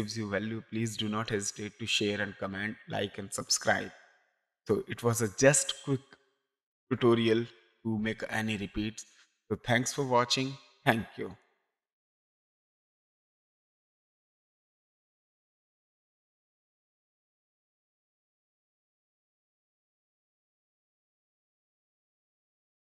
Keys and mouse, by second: 3.7 space, 4.0 click, 11.4 click.